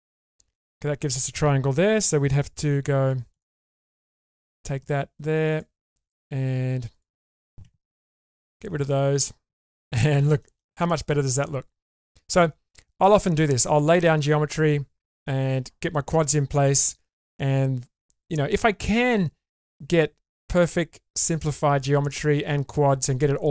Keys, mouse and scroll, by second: 0.0 scroll up 2, 0.3 middle click, 2.6 k, 5.5 click, 7.0 shift+click, 8.4 ctrl+x, 8.9 middle click, 9.4 scroll down 2, 9.8 middle click, 10.4 shift+middle click, 10.8-12.4 middle drag.